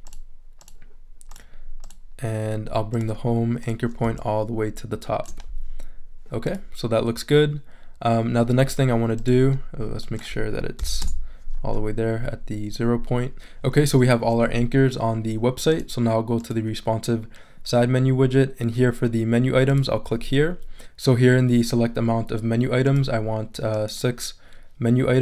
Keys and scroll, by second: 10.8 0, 11.0 Return.